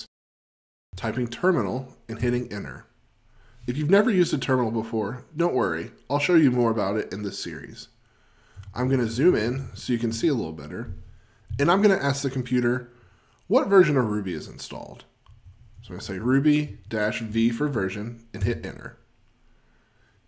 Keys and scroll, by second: 8.8 super+F20, 16.4 F20.